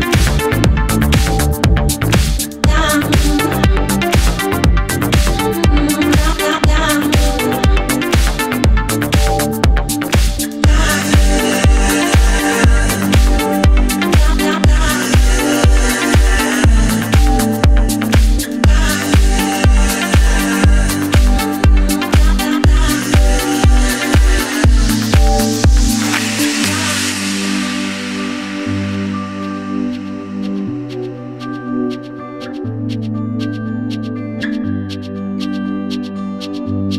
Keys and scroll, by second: 2.8 5, 3.8 super+z, 18.7 Left, 19.2 Right, 19.4 Left, 19.9 Right, 20.6 Up, 21.2 Right, 21.8 Left, 22.6 Right, 23.4 super+s, 28.9 super+c, 29.7 super+c, 32.4 super+v, 33.2 5, 33.6 Return.